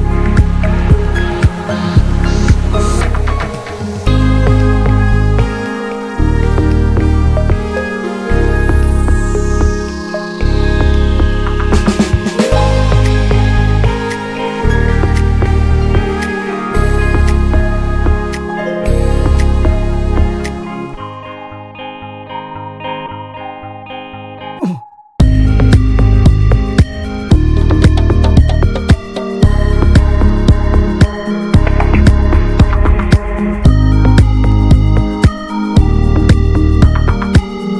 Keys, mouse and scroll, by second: 0.6-0.9 drag, 0.9-1.4 middle drag, 1.4 ctrl+s, 1.6 click, 2.5 shift+click, 3.3 x, 4.1 click, 5.5 alt+middle click, 5.9 alt+middle click, 6.2 alt+middle click, 6.5 scroll down 2, 6.8 ctrl+s, 7.2 click, 8.6-9.1 shift+middle drag, 9.1 s, 12.0 shift+middle click, 12.3 s, 13.7 s, 18.5 s, 19.8 alt+middle click, 20.7 click, 21.3 scroll down 1, 21.5 shift+middle drag, 21.7-22.0 scroll up 1, 22.0 s, 24.0 `, 24.3 click, 24.6-25.0 middle drag, 25.0 click, 25.1 ctrl+a, 25.5 scroll down 1, 25.7-27.0 shift+middle drag, 27.0 scroll up 1, 27.3 ctrl+s, 27.5 Tab, 27.8-28.6 middle drag, 28.6 s, 30.3 Tab, 30.5 click, 30.6 scroll down 1, 30.8-31.9 middle drag, 31.9 click, 32.1 ctrl+a, 33.9-34.4 shift+middle drag, 34.4 ctrl+s, 34.6 Tab, 35.5 3, 35.7 click, 36.0 middle drag, 36.1 scroll up 1, 36.4-36.9 shift+middle drag, 36.9 ctrl+s, 37.1 shift+middle click.